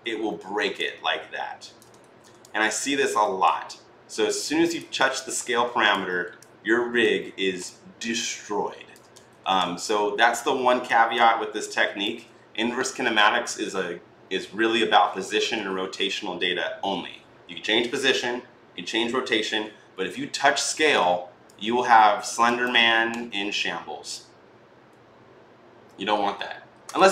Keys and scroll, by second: 1.8 ctrl+z, 9.1 ctrl+z.